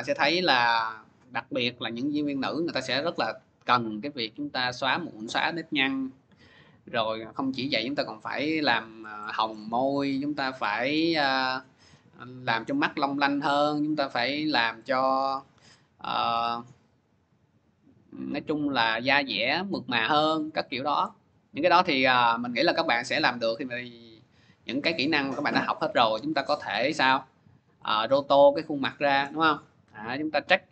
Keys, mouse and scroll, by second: 2.9-8.1 drag, 8.7-10.8 middle drag, 8.7-9.1 scroll, 9.4 scroll, 10.8-13.7 scroll, 15.6-19.3 scroll, 20.4-21.2 scroll, 22.1-24.3 middle drag, 24.3 scroll, 24.9 middle click, 26.2 click, 26.9 middle click, 28.0 middle click, 29.1 middle click, 29.6-30.7 scroll.